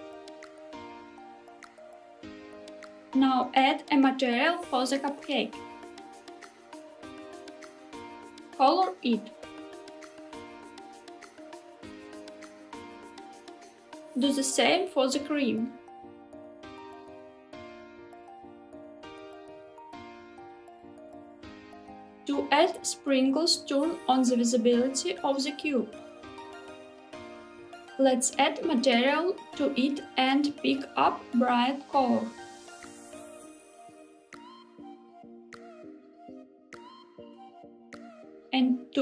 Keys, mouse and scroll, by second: 3.3 click, 4.7 click, 6.2 click, 8.6 click, 14.1-15.2 drag, 15.8 click, 16.7-17.9 drag, 26.3 click, 27.4 click, 28.9 click, 30.3 click, 31.5 click, 38.2 click.